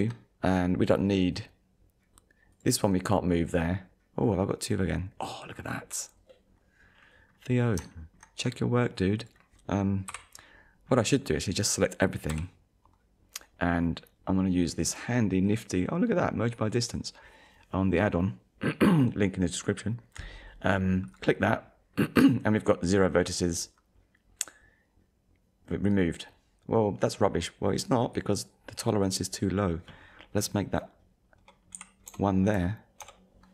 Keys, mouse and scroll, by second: 0.8 middle click, 2.5 click, 4.2 scroll up 1, 5.4 scroll down 1, 6.6-7.1 scroll up 2, 7.3 scroll down 1, 7.9 shift+middle click, 8.5 scroll down 1, 9.2 click, 10.1 KP_1, 10.9-11.5 scroll down 2, 12.3 a, 21.1 click.